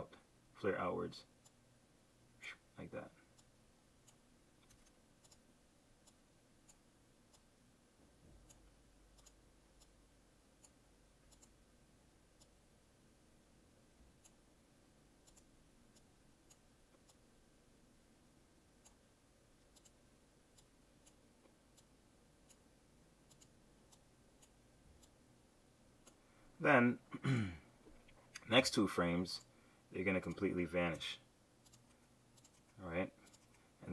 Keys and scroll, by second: 4.8 super+z, 28.6 F6.